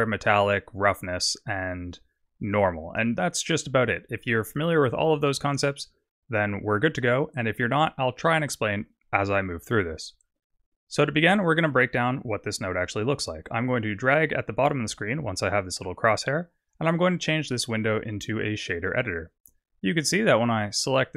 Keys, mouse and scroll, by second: 1.3-1.7 scroll down 4, 2.3-4.5 scroll down 5, 4.5-5.4 scroll up 13, 14.0 click, 17.6 click, 20.7 click.